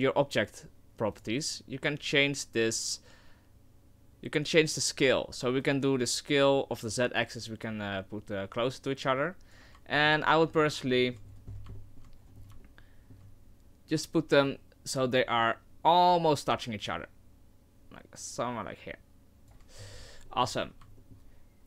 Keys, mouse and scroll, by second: 1.1 click, 5.6 click, 9.9 shift+middle click, 10.2 middle click, 11.1 shift+middle click, 11.5-11.8 scroll up 9, 11.8 shift+middle click, 12.2 shift+scroll down 1, 12.6 shift+middle click, 13.4 scroll up 1, 14.5 click, 19.8-20.3 scroll down 12, 20.3 middle click, 20.5 scroll up 1, 20.6-20.9 scroll down 3, 21.0 shift+middle click.